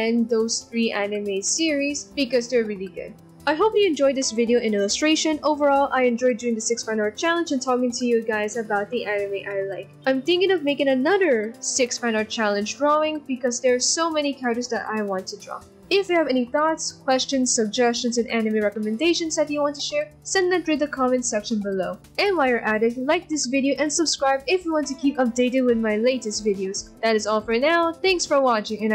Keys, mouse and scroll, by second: 0.5 ctrl+-, 2.9 ctrl+-, 3.1 right click, 4.9 right click, 6.4 ctrl+=, 7.4 right click, 7.7 ctrl+z, 7.9 right click, 9.3 b, 9.6 right click, 10.1 ctrl+-, 11.4 right click, 11.7 right click, 12.4 ctrl+-, 13.1 right click, 13.7 ctrl+=, 13.8 ctrl+z, 14.8 ctrl+t, 15.5 ctrl+t, 15.7 b, 15.8 ctrl+-, 15.9 ctrl+=, 16.1 ctrl+-, 16.2 ctrl+=, 16.7 ctrl+t, 17.0 ctrl+t, 17.2 b, 17.3 ctrl+-, 17.4 b, 17.4 ctrl+-.